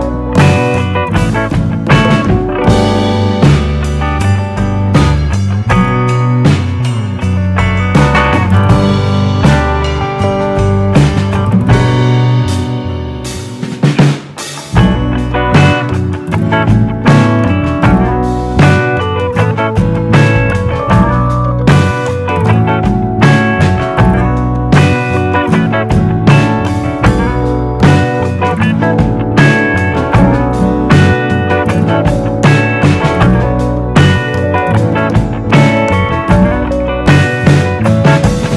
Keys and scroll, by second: 14.4 super+d, 30.9 super+d.